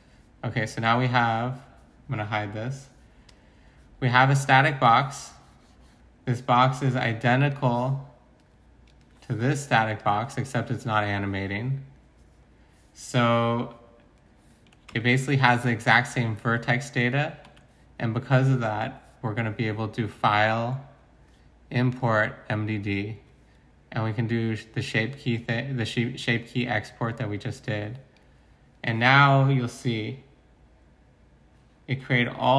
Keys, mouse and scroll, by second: 9.4 g, 14.9 Tab, 17.4 Tab.